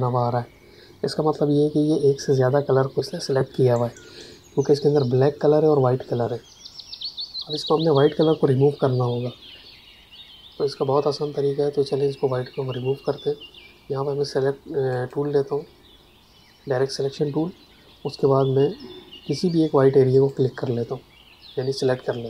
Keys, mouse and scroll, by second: 14.8 click, 20.1 click.